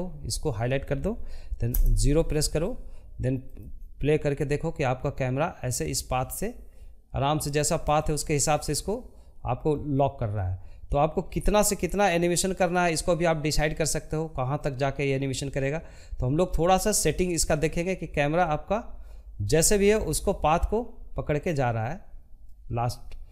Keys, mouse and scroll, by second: 0.1 KP_0, 2.0-4.8 drag, 6.2-18.4 drag.